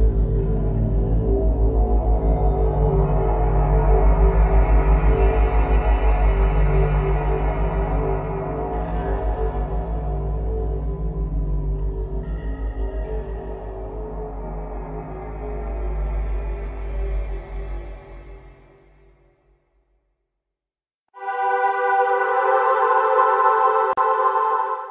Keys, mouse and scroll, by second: 0.2 click, 2.1 scroll up 2, 2.9-3.4 scroll up 1, 4.1 click, 4.7 click, 5.6 click, 7.4 click, 9.3 click.